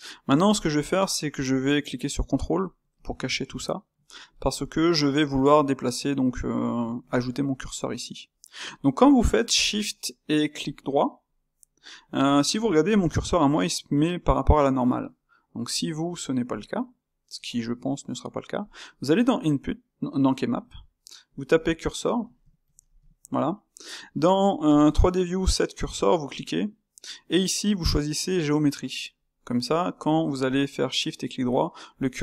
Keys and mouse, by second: 3.0 shift+q, 3.9-7.5 middle drag, 7.5 shift+right click, 8.3-9.2 middle drag, 9.2-9.6 shift+right drag, 9.6-11.0 middle drag, 11.0-12.0 shift+right drag, 12.0-13.0 ctrl+shift+middle drag, 13.0-18.6 shift+right drag, 18.6-30.6 drag, 30.6-32.2 shift+right drag.